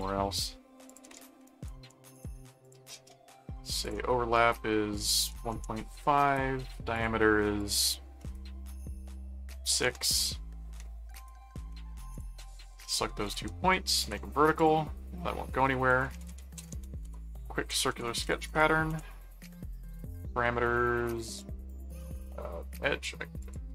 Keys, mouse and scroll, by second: 0.9 click, 1.4 right click, 2.1 shift+click, 3.8 click, 6.9 click, 7.6 click, 11.1 right click, 12.1 ctrl+click, 13.3 ctrl+click, 14.0 alt+v, 14.6 click, 15.7-18.6 typing, 18.9 Return, 21.3 click, 23.4 click.